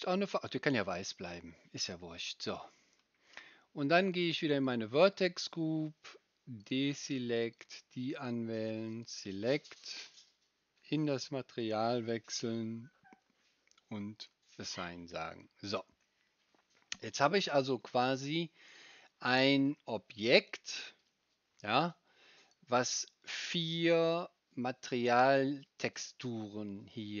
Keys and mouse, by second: 4.7-6.6 right drag, 6.6 middle click, 7.6-9.0 right drag, 9.0-11.2 middle drag, 11.2-14.2 right drag, 14.2-15.4 middle drag, 15.4-18.2 right drag, 18.2-24.9 middle drag, 24.9-26.7 drag, 24.9-26.7 right drag, 26.7 middle click, 26.9 click, 26.9 right click, 26.9-27.2 middle drag.